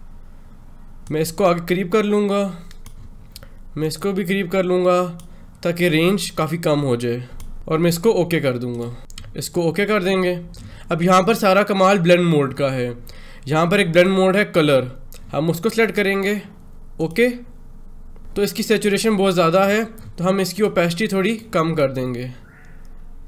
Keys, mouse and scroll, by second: 0.9-8.6 drag, 9.9 click, 13.8 click, 16.9 click, 20.4-23.2 drag.